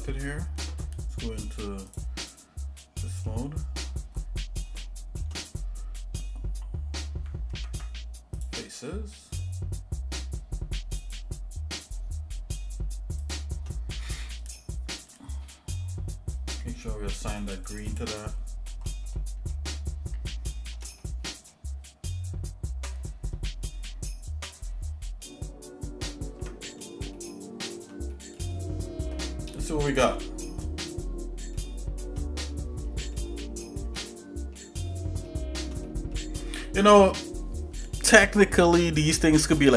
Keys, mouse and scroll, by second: 1.9 click, 3.0 middle click, 3.8-4.6 scroll up 4, 4.8 shift+middle click, 7.5 ctrl+Tab, 11.2 shift+click, 13.4 shift+click, 16.4 click, 17.5 click, 17.8 click, 17.9 click, 18.3 middle click, 18.9 middle click, 19.5-20.8 shift+middle drag, 21.0 middle click, 21.5-22.9 shift+middle drag, 26.5 Tab, 27.2 shift+middle click, 28.1 middle click, 28.6-29.0 scroll down 2, 30.2 click, 31.6 shift+middle click, 33.1 shift+middle click, 34.1 middle click, 34.6-35.2 scroll down 2, 35.3 shift+middle click, 35.8 middle click.